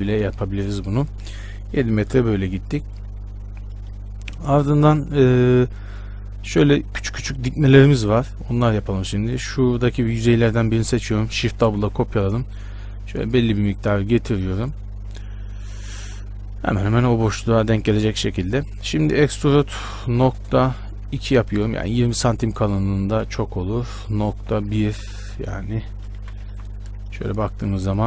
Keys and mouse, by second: 9.5-11.7 drag, 11.7 shift+d, 17.5-19.7 drag, 19.7 e, 23.3 ctrl+z, 23.8 e, 26.4 a, 26.7 b.